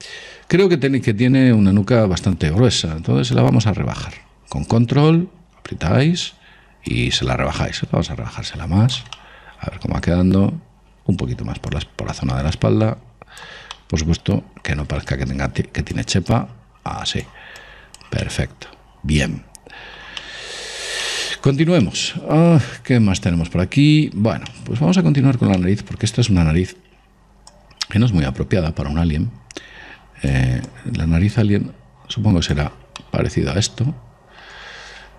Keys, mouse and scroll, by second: 4.0 click, 7.6 click, 9.6-11.4 middle drag, 12.1 click, 14.2-15.8 middle drag, 15.5-19.7 drag, 18.6-24.0 middle drag, 24.4-24.9 scroll up 1, 24.9-27.7 middle drag, 27.9 click, 31.1 click, 33.4-35.1 middle drag.